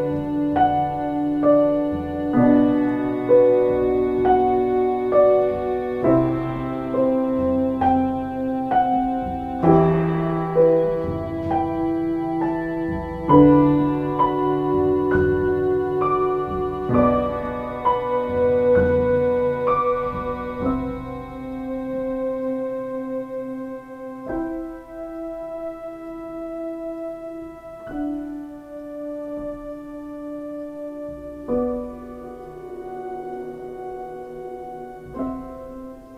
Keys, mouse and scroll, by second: 0.7 ctrl+z, 1.9 ctrl+z, 4.2 ctrl+space, 9.3 ctrl+space, 10.3 space, 34.8 ctrl+space.